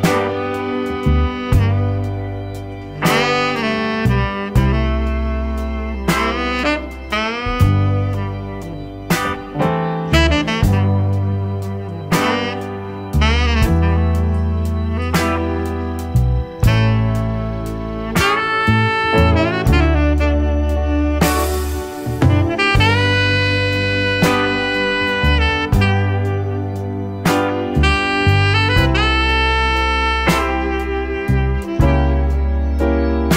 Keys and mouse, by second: 2.4-4.4 drag, 7.0 click, 8.8-9.9 middle drag, 9.9 shift+click, 10.2-12.1 shift+drag, 12.4 shift+click, 16.2-17.0 drag, 17.8-19.1 drag, 19.8 shift+middle click, 20.1 click, 20.6 shift+d, 21.4 click, 22.1-23.0 drag, 23.5-24.3 drag, 24.7-25.9 drag, 26.4 shift+drag, 26.7 shift+a, 30.4-31.1 drag, 31.6-32.1 drag, 32.4-33.3 drag.